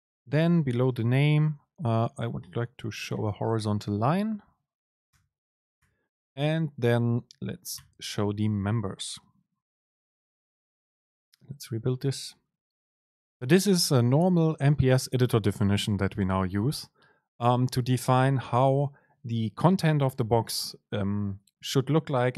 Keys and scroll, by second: 0.8 Return, 0.8 super+space, 6.0 Return, 6.3 super+space, 10.3 ctrl+shift+super+F9.